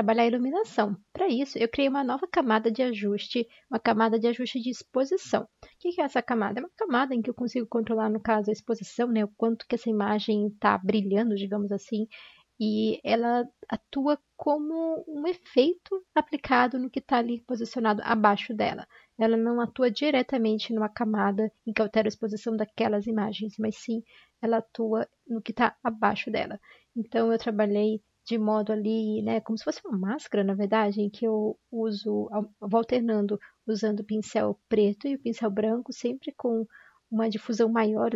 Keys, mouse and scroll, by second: 13.2 x, 16.6 ctrl+z, 16.6 x, 28.4 ctrl+z.